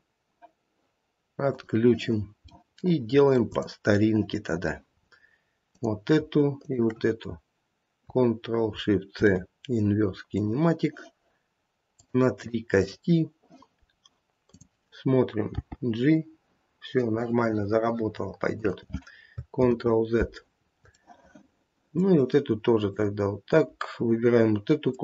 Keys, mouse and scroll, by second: 1.4 click, 3.3 middle click, 3.9 click, 4.0 middle click, 4.0 scroll down 1, 5.0 scroll up 3, 5.6 click, 6.5 shift+click, 9.1 ctrl+shift+c, 12.0 click, 13.8 scroll down 1, 14.5 click, 15.5 g, 19.6 ctrl+z, 20.5-20.8 scroll down 2, 21.0 middle click, 22.9 click, 24.8 shift+click.